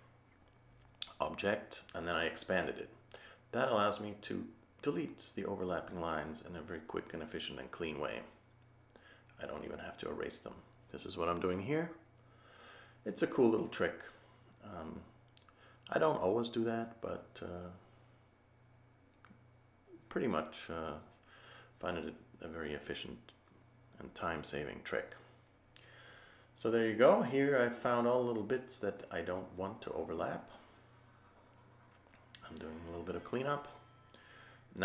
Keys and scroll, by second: 7.7 a, 15.3 a, 22.3 a, 33.3 a.